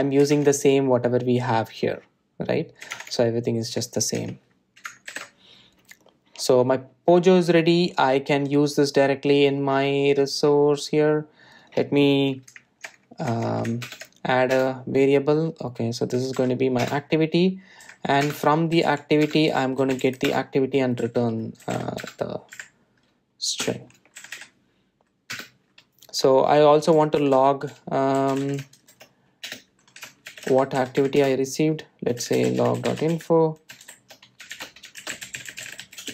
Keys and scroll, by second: 14.9 alt+Return, 17.8 alt+Return, 27.0 Return, 31.6 Delete.